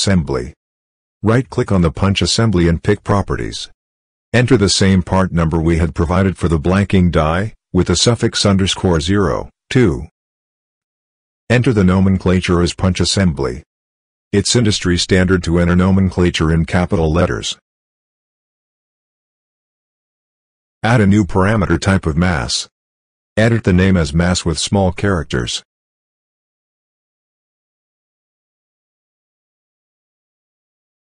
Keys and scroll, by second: 7.6 ctrl+v, 9.7 2, 11.8-13.6 typing, 14.7-15.9 typing, 17.4-18.7 typing, 25.4 m, 25.9 a.